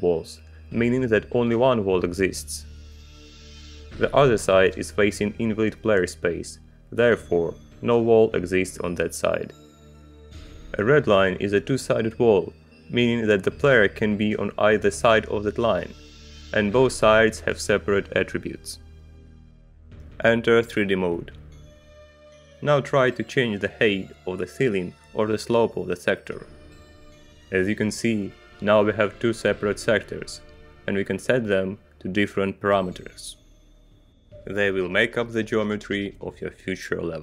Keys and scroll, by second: 21.4 Return, 23.9 Page_Up, 24.3 Page_Down, 25.4 Page_Up, 27.0 [, 28.4 ], 29.8 [, 30.3 ].